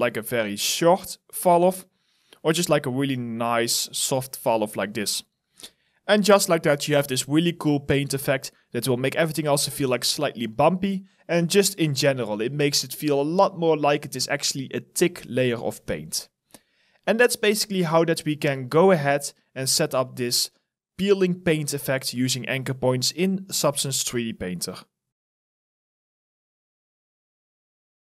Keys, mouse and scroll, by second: 4.2 alt+right click, 5.0 alt+click, 6.3 shift+right click, 6.3 alt+click, 7.3 alt+click, 7.3 shift+right click, 8.4 shift+right click, 8.4 alt+click, 10.6 alt+click, 12.6 shift+right click, 16.1 alt+right click, 17.0 alt+click, 17.5 alt+middle click, 18.0 alt+right click, 18.4 alt+click, 18.9 alt+middle click, 19.5 alt+click, 19.8 alt+middle click, 21.0 alt+right click, 21.5 alt+click.